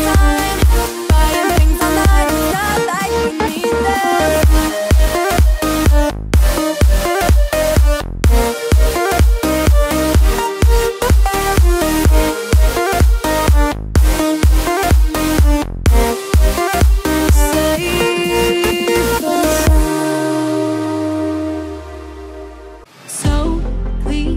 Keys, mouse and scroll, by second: 2.6-2.9 alt+scroll up 1, 3.2-5.8 drag, 5.8 alt+scroll down 1, 6.6 click, 7.8-8.8 scroll up 1, 10.0-10.4 scroll up 1, 11.0-11.3 alt+scroll up 1, 12.4 right click, 13.0 click, 15.6-16.4 alt+scroll down 1, 16.4-16.7 alt+scroll up 1, 17.1 click, 17.3 alt+scroll up 1, 17.6 v, 18.1 alt+click, 18.8 ctrl+d, 19.8 shift+click, 20.9 ctrl+g, 21.3 alt+click, 22.0 ctrl+g, 23.8 shift+click.